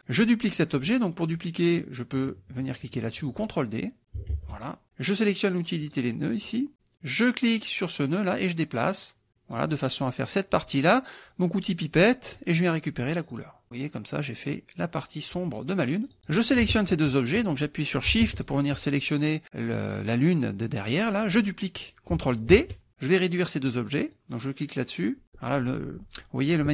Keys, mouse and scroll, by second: 4.3 ctrl+d, 5.9 click, 8.3-9.8 drag, 12.3 click, 13.3 click, 16.1 click, 18.5 shift+click, 22.5 ctrl+d, 24.1-25.5 drag.